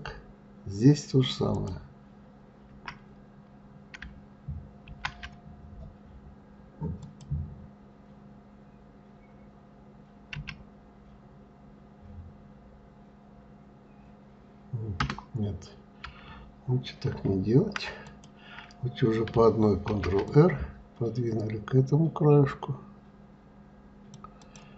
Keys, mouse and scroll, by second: 1.1 click, 16.7 ctrl+z, 17.6 click, 19.4 ctrl+r.